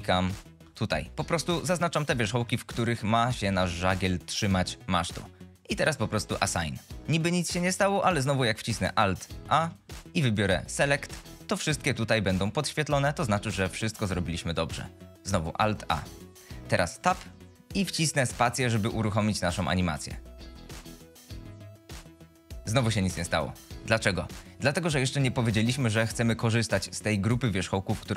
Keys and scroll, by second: 9.6 alt+a, 16.0 alt+a, 17.0 Tab, 20.5 space, 24.2 shift+Left.